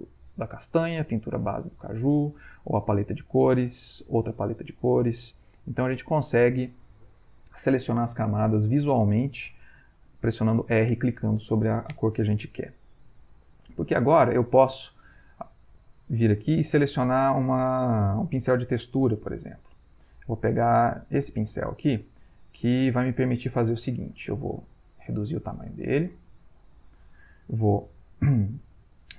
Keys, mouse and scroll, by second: 0.6 click, 2.4 click, 4.1 click, 5.8 click, 9.8 r, 10.3 click, 13.2 click, 13.8 ctrl+click, 14.6-15.0 ctrl+scroll up 1, 16.2 click, 17.8 click, 20.5 click, 22.3 ctrl+shift+click, 23.0 ctrl+middle click, 24.2-25.8 shift+drag, 26.3 ctrl+middle click, 27.1 ctrl+middle click.